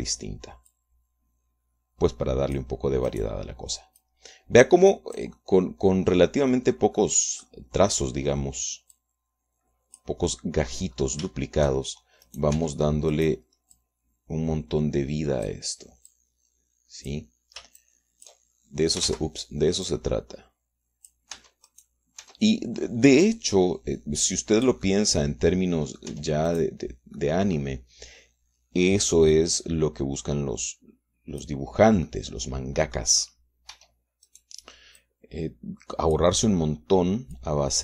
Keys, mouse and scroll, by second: 1.9-3.9 drag, 4.3 right click, 5.2-7.9 drag, 6.5-7.9 right drag, 8.1 click, 10.1-11.3 drag, 11.5 click, 12.1 shift+middle click, 13.5 click, 13.7 Tab, 14.3 right click, 14.9-16.9 drag, 17.3-18.5 drag, 19.0 shift+click, 20.3 ctrl+z, 21.1-22.5 drag, 22.5 Tab, 22.9 middle click, 23.4 Tab, 24.5-26.1 drag, 26.1-27.7 middle drag, 27.3 Tab, 27.7 click, 28.0 middle click, 30.5-32.8 drag, 33.3-34.3 middle drag, 34.9 Tab, 35.5 right click, 36.2-37.5 drag.